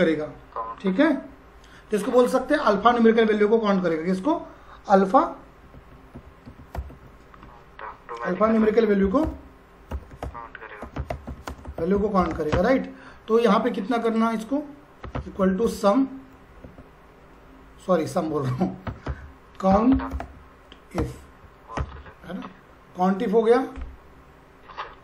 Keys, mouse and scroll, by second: 5.5-12.8 typing, 14.0 click, 14.8-16.1 typing, 16.6 Tab, 19.1-21.8 typing.